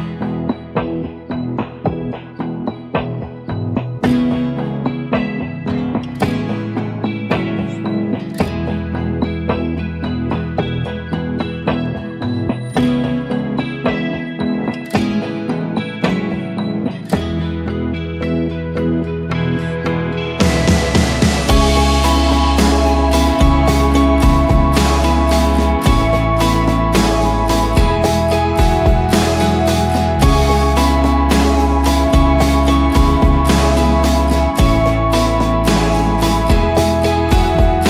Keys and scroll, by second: 1.4 Return, 2.4 Delete, 3.4-4.4 typing, 13.8-15.8 typing, 17.0 ctrl+t, 18.0 ctrl+a, 18.2-19.5 typing, 19.0 Return, 19.3 ctrl+a, 21.1 ctrl+d, 21.4 ctrl+t, 23.2 Return, 25.1 Return, 26.2-27.1 typing, 29.0 ctrl+g, 29.6-33.1 typing.